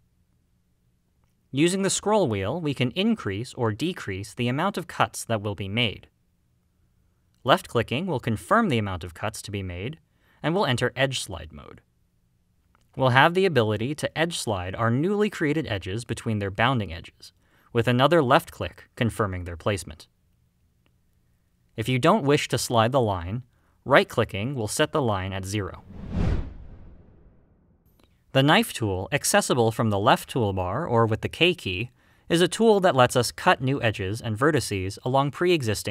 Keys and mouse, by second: 20.6 click, 21.8 ctrl+z, 21.8 ctrl+r, 24.4 right click, 30.7 click, 33.5-35.9 drag.